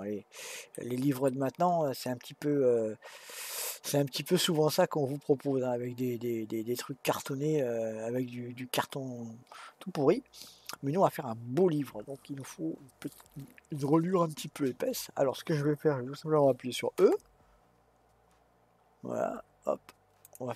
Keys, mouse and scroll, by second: 0.8-1.2 scroll down 2, 1.2-4.4 middle drag.